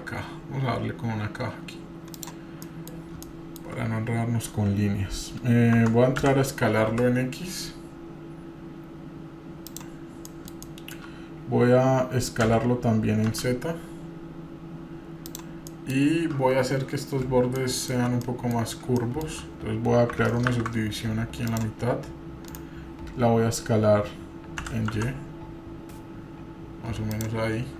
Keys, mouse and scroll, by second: 2.6-3.1 middle drag, 3.2-3.8 shift+middle drag, 3.2 scroll up 1, 3.8 scroll up 2, 5.8 Tab, 6.5 s, 10.2 middle click, 10.6 shift+middle click, 12.4 s, 15.7 middle click, 16.1 scroll up 1, 17.6 shift+middle click, 18.3 middle click, 18.6 scroll up 2, 18.9-19.4 shift+middle drag, 20.5 ctrl+r.